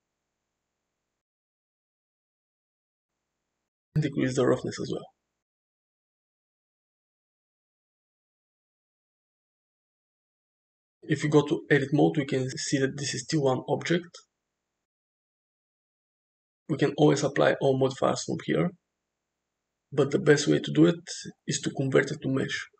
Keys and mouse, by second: 3.7-6.1 drag, 12.5 Tab, 14.3 Tab, 17.4 click, 19.0 drag, 19.7-20.6 drag, 21.8-22.7 right drag.